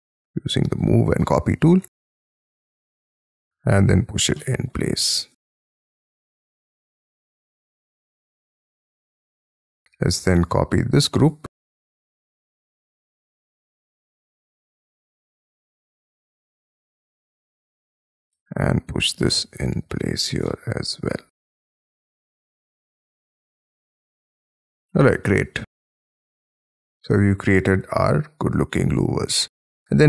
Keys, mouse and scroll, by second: 0.8 shift+click, 1.2 middle click, 2.1 shift+middle click, 2.2 space, 2.4 scroll up 5, 3.0 double click, 3.5 p, 4.3 shift+middle click, 5.0 shift+middle click, 6.6-7.1 scroll down 7, 6.8 space, 7.2 Escape, 7.6 scroll down 6, 8.0 middle click, 8.5 shift+middle click, 9.7 Escape, 10.3 double click, 10.7 double click, 11.3 Escape, 11.4 scroll up 4, 11.9 double click, 12.3 Escape, 12.9 double click, 13.1 double click, 13.4 m, 14.1 scroll up 5, 14.6 scroll up 4, 15.0-15.4 scroll down 17, 17.0 shift+click, 17.1 shift+middle click, 17.5-18.8 typing, 17.6 scroll up 5, 17.9 double click, 20.4 shift+middle click, 22.2 space, 22.4 scroll down 3, 22.4 Escape, 22.9-23.4 scroll down 10, 23.2 Escape, 23.7 middle click, 24.2-24.7 scroll down 9, 24.9 shift+middle click, 29.1-30.0 scroll up 39.